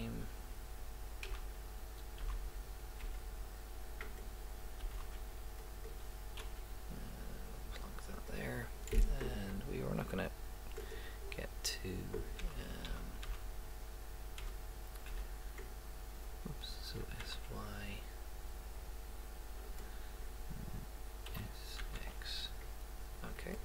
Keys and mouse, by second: 1.3 a, 2.2 s, 4.8 s, 6.4 g, 11.0 right click, 11.4 click, 12.4 a, 12.9 a, 13.2 a, 14.4 d, 15.1 y, 16.9 s, 21.3 s.